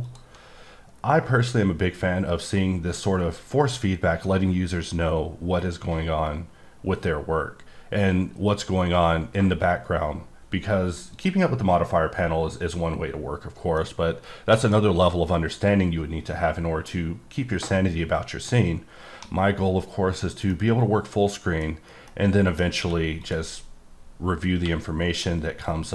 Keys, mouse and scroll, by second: 0.1 click, 11.1 click, 12.1-12.6 scroll down 2, 12.6-13.4 scroll up 3, 13.4-13.8 scroll down 1, 13.8 middle click, 16.0-17.4 scroll up 1, 19.2 alt+Num_Lock, 20.0 scroll down 1, 20.5 middle click, 21.6 scroll down 1, 22.1 middle click, 22.8 q, 23.2 click, 24.6 q, 25.4 click.